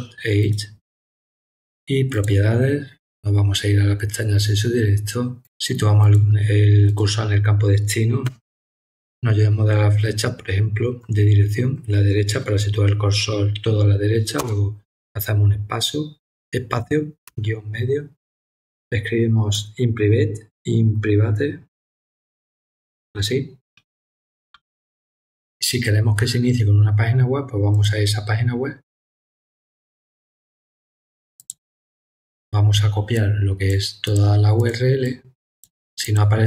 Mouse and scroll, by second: 0.4 right click, 2.1 click, 6.0 click, 6.8 click, 27.7 click, 31.3 click, 33.1 click, 34.0 click, 34.5 click, 35.0 click, 36.0 click.